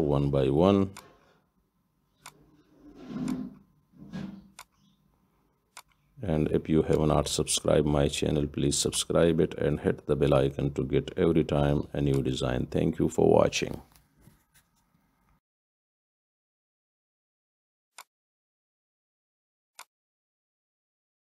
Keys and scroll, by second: 14.0 Delete.